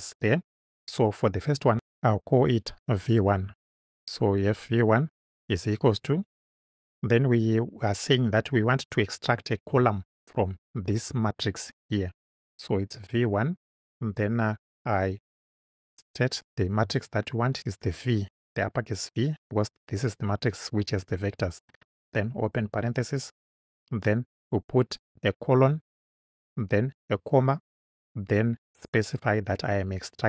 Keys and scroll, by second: 1.8 BackSpace, 3.4 1, 6.7 =, 16.2 shift+v, 22.7 shift+9, 25.7 shift+;, 27.2 ,.